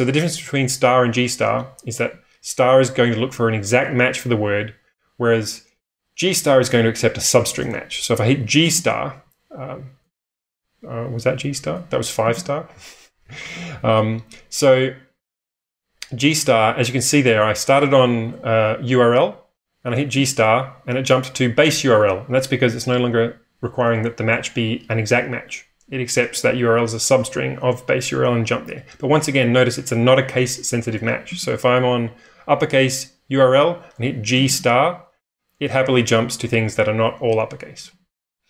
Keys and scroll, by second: 8.1-9.2 typing, 11.7-14.2 typing, 17.7-18.8 typing, 19.9-20.7 typing, 28.4-29.2 typing, 31.3 j, 34.1-34.4 typing, 37.5 n, 37.8 n, 37.9 n, 38.1 n.